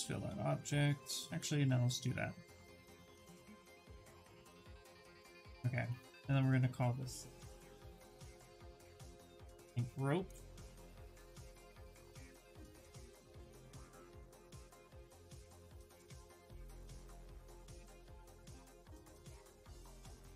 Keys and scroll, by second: 7.4-9.6 typing, 10.1 Return, 14.0 w.